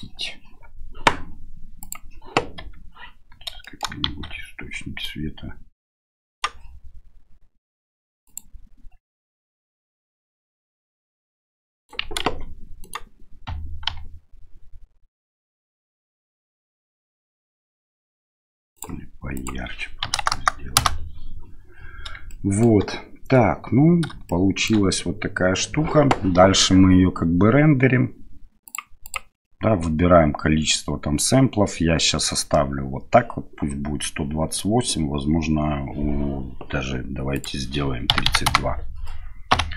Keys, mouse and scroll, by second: 1.9 click, 2.6 KP_7, 3.7 shift+middle drag, 4.1 shift+z, 5.1-6.5 right drag, 8.3 click, 11.1 right click, 12.3 ctrl+z, 12.9 right click, 13.9 g, 19.4-21.4 drag, 20.4 KP_0, 22.3-22.7 shift+middle drag, 24.3 shift+middle click, 29.1 click, 37.4-39.0 drag.